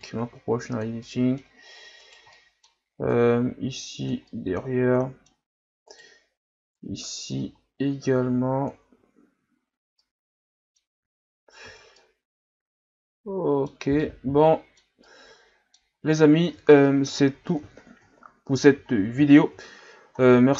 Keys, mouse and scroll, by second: 0.0-1.0 drag, 1.0-2.1 middle drag, 2.1 right click, 2.3 middle click, 3.1-4.3 drag, 4.3-5.9 middle drag, 5.9 right click, 6.7-8.9 drag, 8.9 Tab, 9.3 a, 9.6-10.0 scroll down 4, 10.0-11.6 middle drag, 11.6 ctrl+s, 12.0-16.5 middle drag, 16.5 KP_1, 17.4-18.8 scroll down 4, 18.8-20.0 scroll down 3, 20.0-20.5 scroll down 1.